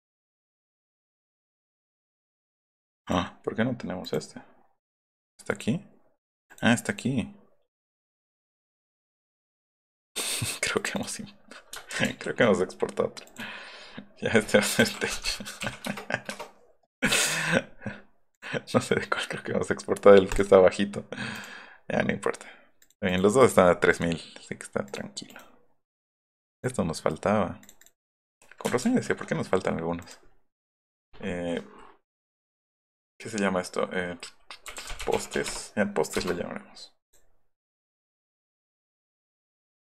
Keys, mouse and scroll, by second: 0.8 click, 1.2 click, 1.6 click, 2.1 click, 2.4 click, 3.0 click, 4.0 click, 5.5 click, 6.5 click, 6.8 right click, 8.7 right click, 9.9 click, 10.7 click, 10.9 click, 12.1 ctrl+alt+shift+s, 13.3 click, 14.5-16.1 typing, 16.2 Return, 18.3 click, 20.3 click, 21.3 click, 22.8 click, 23.0 click, 23.4 click, 23.9 click, 24.8 click, 25.2 click, 26.5 click, 27.6 click, 27.8 click, 28.9 ctrl+alt+shift+s, 30.0 click, 34.4-35.8 typing, 36.1 Return, 37.0 click, 38.1 click, 38.4 drag, 38.7 click, 39.0 click.